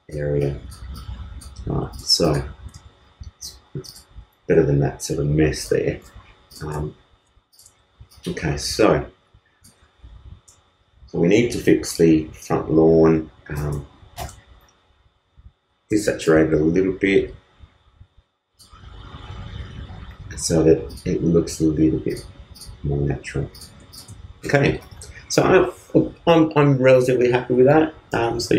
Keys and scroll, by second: 14.1 super+u, 24.6 super+space, 24.8 super+s.